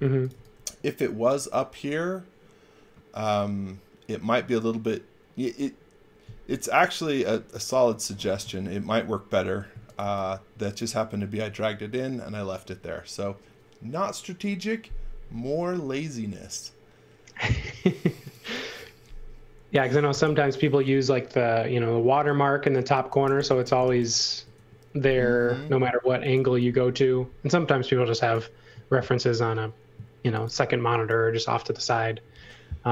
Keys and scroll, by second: 0.0-0.8 typing, 9.7 x, 10.0 v, 17.9 space, 20.0 shift+g, 22.6-24.4 typing, 26.0 x, 26.3 v, 29.9-31.5 typing.